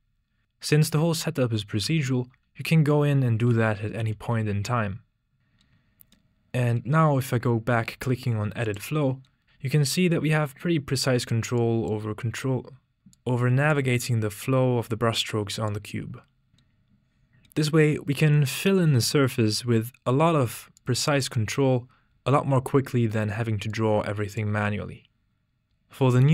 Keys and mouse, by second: 0.4 shift+r, 2.0 shift+r, 3.8 shift+click, 4.1 shift+r, 5.4 Tab, 8.6 click, 11.5 click, 15.1-16.5 drag.